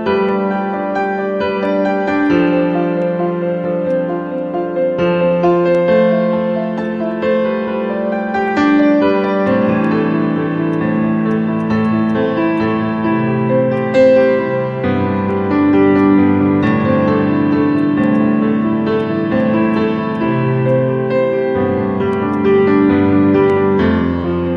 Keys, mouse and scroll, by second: 9.4 alt+click, 18.1 right click, 19.7 right click, 24.4 scroll up 1.